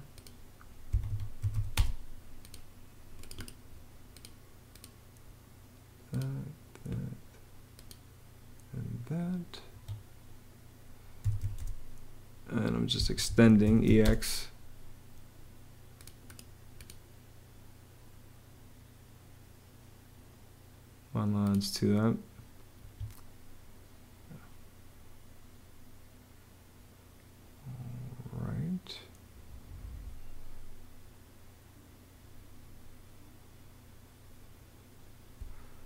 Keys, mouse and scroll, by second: 0.7 Home, 0.9-1.8 typing, 9.5 Escape, 10.8-11.7 typing, 12.8 Escape, 13.4 e, 13.7 x, 13.9 space, 22.6 Escape, 35.4-35.8 typing.